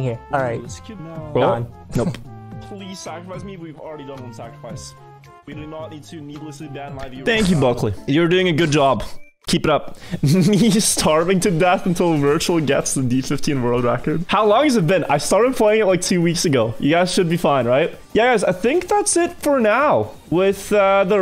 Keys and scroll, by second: 0.1 Left, 0.3 Right, 0.9 Left, 2.5 Right.